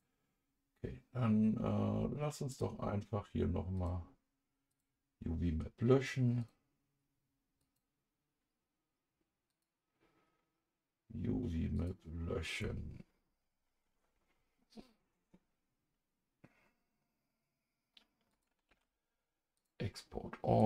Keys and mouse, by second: 2.5 click, 4.8-6.5 drag, 7.6 click, 9.5-11.9 drag, 18.3 click, 18.7 ctrl+s, 19.6 click.